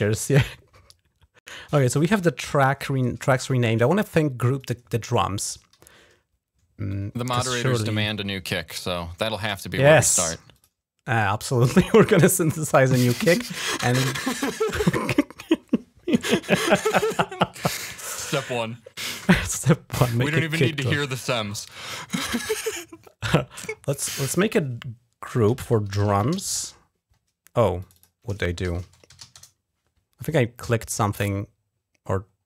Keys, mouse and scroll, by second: 0.2-1.3 drag, 1.9 shift+l, 4.3 click, 7.8 click, 10.3 click, 17.9-18.3 scroll down 2, 19.9-20.3 scroll up 2, 21.0 click, 21.5-22.0 scroll up 1, 22.8-24.1 drag, 25.2-26.6 typing, 27.6 click, 27.8-29.5 typing, 30.8-31.2 scroll up 1, 32.2-32.4 scroll down 2.